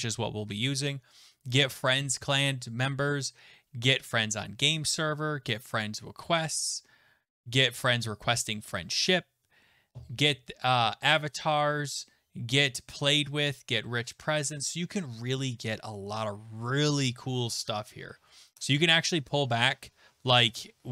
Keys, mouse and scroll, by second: 5.0-6.1 scroll, 14.2-16.3 scroll.